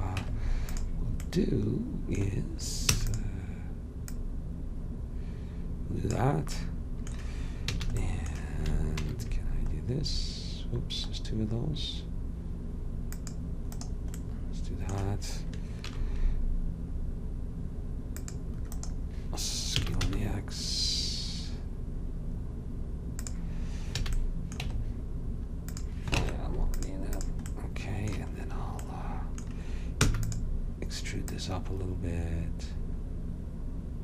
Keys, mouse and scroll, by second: 0.3 Tab, 3.0 e, 4.2-6.0 drag, 7.8 a, 9.1 ctrl+r, 15.9 ctrl+r, 19.9 s, 24.1 a, 24.7 Tab, 26.3 ctrl+Tab, 30.1 e, 31.3-33.2 drag.